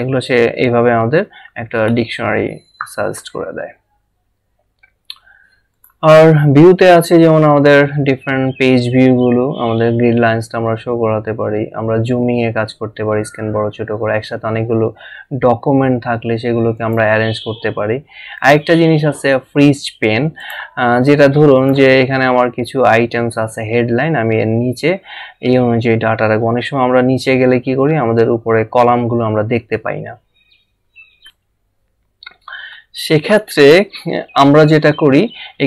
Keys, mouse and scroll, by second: 5.7 click, 16.8 click, 18.4 click, 20.4 click, 26.3 scroll down 1, 28.2-29.0 scroll up 1, 31.0-31.9 typing, 34.3 click.